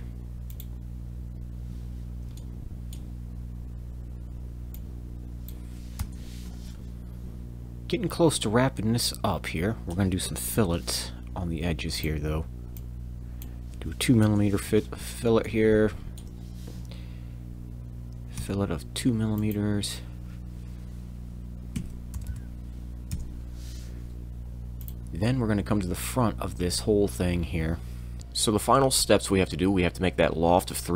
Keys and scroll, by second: 0.1 Tab, 0.1 Return, 0.1 6, 0.1 5, 0.1 e, 6.0 Return, 10.5 f, 18.4 f, 21.7 2, 22.1 m, 23.1 Return, 28.2 z.